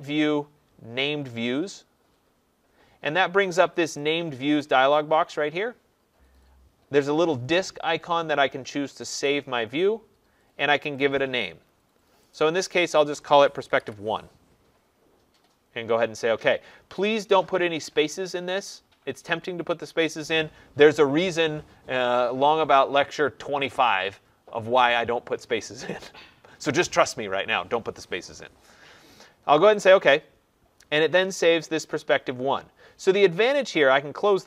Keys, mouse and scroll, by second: 3.6 click, 4.6 click, 9.2 click, 12.3 click, 13.4-14.2 typing, 29.8 click.